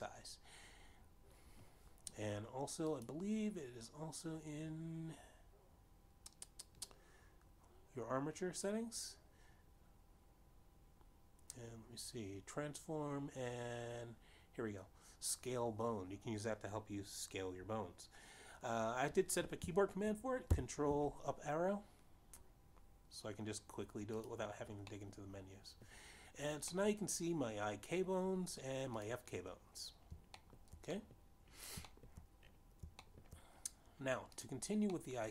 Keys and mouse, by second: 4.3 click, 21.6 ctrl+Up, 25.4 click, 26.3 middle click, 28.0 middle click, 30.3 click, 31.8 shift+middle click, 32.3 middle click, 33.4 shift+middle click, 34.3 shift+middle click.